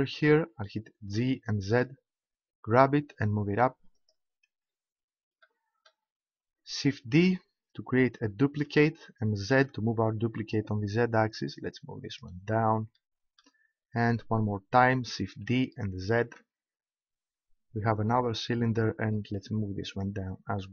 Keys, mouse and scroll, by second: 1.2 g, 4.3 click, 8.7 shift+d, 12.2-14.6 drag, 15.4 shift+d, 20.0 click.